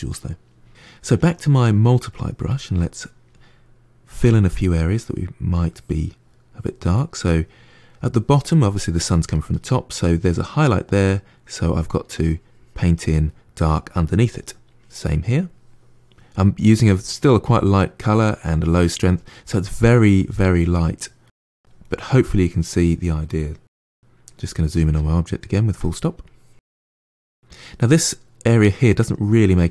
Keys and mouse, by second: 1.0-2.4 drag, 2.4-3.9 ctrl+middle drag, 3.9 f, 4.4-5.4 middle drag, 5.4-6.8 drag, 6.8-11.3 middle drag, 11.3-13.2 drag, 13.2-14.6 middle drag, 14.6-17.6 drag, 19.2 middle click, 19.7-21.1 drag, 21.1 middle click, 21.5 click, 21.9 middle click, 22.1 click, 22.5-23.6 middle drag, 23.6 KP_Decimal, 23.8-26.1 middle drag, 26.1 click, 27.0 middle click, 27.4-29.0 drag, 29.0 shift+middle click, 29.6 click.